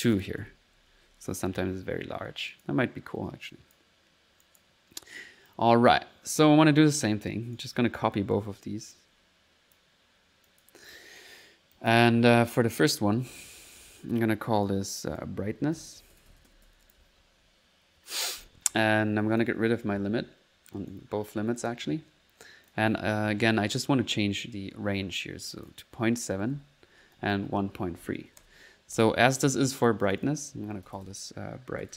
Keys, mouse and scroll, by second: 0.4-1.9 typing, 2.5 click, 3.1 middle click, 3.5 click, 4.4 click, 6.7-7.8 right drag, 7.9-8.7 typing, 8.9 ctrl+click, 9.9 ctrl+click, 10.5 click, 11.8 click, 13.7 click, 14.6 click, 15.1 click, 19.3 click, 19.7 click, 20.8 right click, 21.0-31.9 Delete, 21.6 click, 22.7 click, 25.5 click, 27.2 click, 29.3 click, 30.1 click.